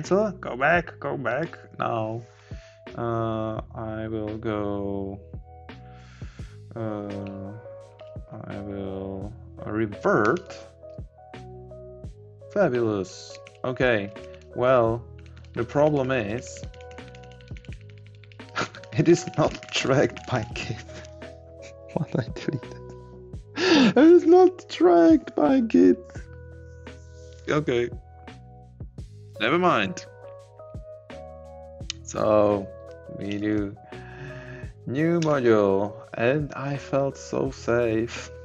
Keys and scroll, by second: 33.6 ctrl+shift+a.